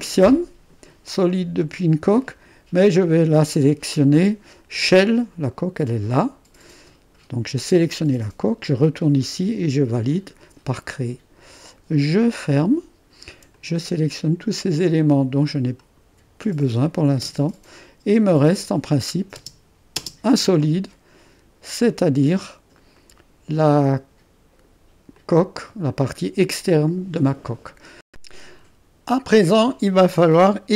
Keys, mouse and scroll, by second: 0.0-1.1 drag, 3.0 click, 5.8-7.6 drag, 8.7 click, 10.1-14.2 drag, 15.9-17.3 drag, 17.3 space, 18.6 click, 19.4 space, 20.0 space, 20.6-23.0 drag, 26.8 click.